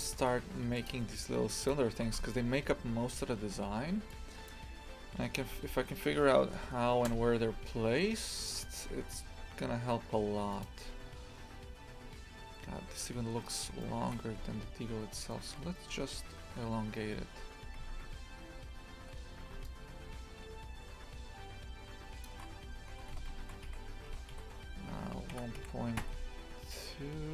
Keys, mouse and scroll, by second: 0.0 shift+middle click, 0.9 click, 1.7 click, 4.5 shift+a, 5.4 r, 10.8 scroll down 2, 13.4 right click, 13.8 shift+middle click, 14.2 Tab, 14.7-15.1 scroll up 2, 15.3-17.8 shift+middle drag, 17.8 a, 18.0 a, 19.1 z, 22.2 shift+click, 22.9 g.